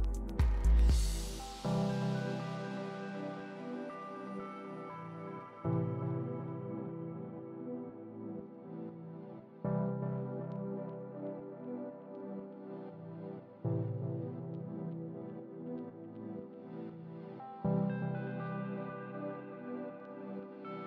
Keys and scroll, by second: 6.3 super+c, 8.6 super+v, 10.5 super+v, 12.1 super+v, 13.5 super+v, 15.0 super+v, 16.5 super+v.